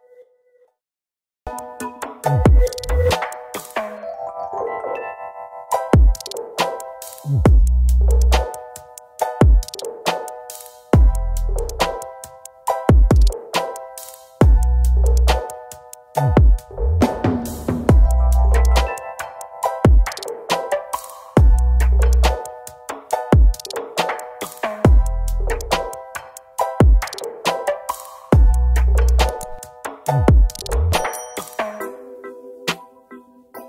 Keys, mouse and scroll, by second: 1.1 right click, 2.9 Down, 4.0 shift+right click, 5.9 double click, 8.1 ctrl+z, 10.0 ctrl+z, 18.5 ctrl+Page_Down, 18.5 scroll down 1, 19.4 z, 24.0 Left, 24.2 Left, 24.3 Left, 24.8 Left, 26.6 shift+right click, 28.1 double click, 29.8 shift+click, 32.6 shift+click.